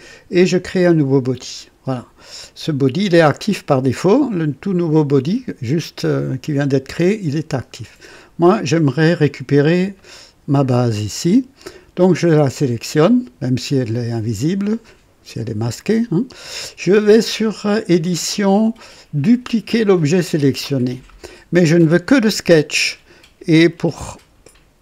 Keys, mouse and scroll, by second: 1.1 click, 4.6 click, 8.4 click, 9.9 click, 18.0 click, 19.8 click.